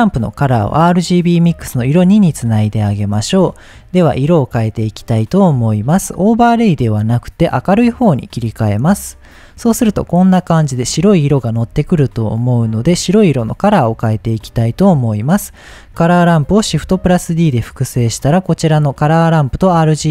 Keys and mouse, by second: 0.0-1.5 drag, 2.8 shift+middle click, 5.1 shift+middle click, 6.5-8.6 drag, 12.0 click, 14.6 click, 15.5 middle click, 16.9 shift+d, 17.8 click, 19.9 middle click.